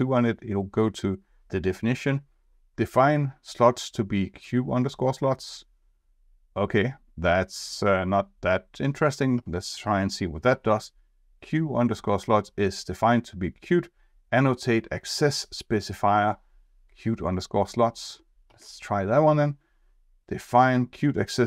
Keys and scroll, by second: 9.3 F2, 18.4 F2.